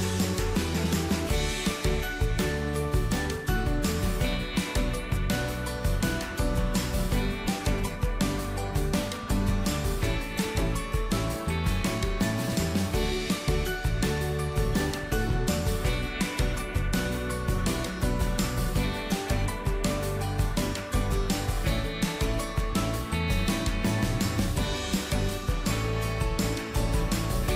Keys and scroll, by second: 7.0 ctrl+d.